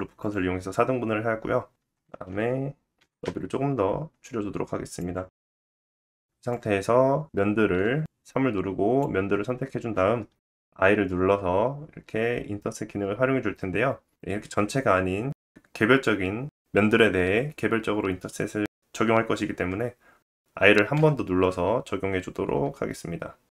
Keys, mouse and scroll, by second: 0.0-10.6 middle drag, 0.7 Tab, 1.0 Tab, 2.4 s, 3.8 Tab, 5.9 Tab, 5.9 s, 6.4 Tab, 6.5-23.5 drag, 6.5-23.5 right drag, 8.1 3, 10.9 i, 11.0-23.5 middle drag.